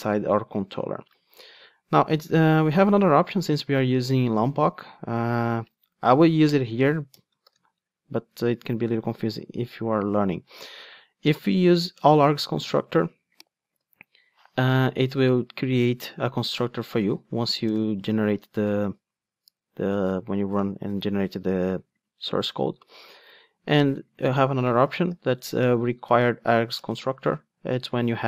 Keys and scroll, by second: 12.0 Return, 13.6 super+x, 26.8 Return.